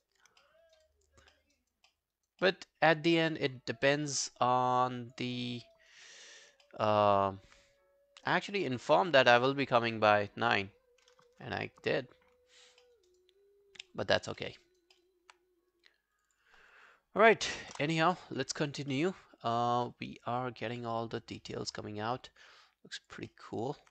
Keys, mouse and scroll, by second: 0.2 scroll down 2, 0.4 alt+middle click, 0.7 alt+right click, 0.9 alt+click, 1.3 alt+middle click, 1.6 alt+right click, 1.9 alt+middle click, 2.2 alt+right click, 2.4 alt+middle click, 3.1 alt+middle click, 4.5-4.8 alt+scroll down 1, 4.8 alt+click, 5.4 alt+middle click, 5.8 alt+right click, 6.1 alt+middle click, 6.3 alt+right click, 6.7 alt+middle click, 7.0 alt+right click, 7.6 right click, 9.0 double click, 9.5 double click, 11.0 double click, 11.1 ctrl+BackSpace, 12.6 scroll down 1, 12.8 alt+middle click, 13.1 alt+right click, 13.4 alt+scroll down 1, 13.8 alt+middle click, 14.0 alt+scroll down 1, 14.1 alt+right click, 14.4 alt+middle click, 14.6 alt+right click, 15.0 alt+middle click, 16.3 double click, 17.5 double click, 17.7 ctrl+BackSpace, 18.6 scroll down 1, 18.9 alt+middle click, 19.3 alt+scroll down 1, 19.5 alt+click, 19.9 alt+middle click, 20.1 alt+right click, 20.3 alt+click, 20.6 alt+middle click, 20.8 alt+right click, 21.0 alt+click, 21.4 alt+middle click, 21.6 alt+right click, 21.8 alt+click, 23.3 alt+middle click, 23.5 alt+right click.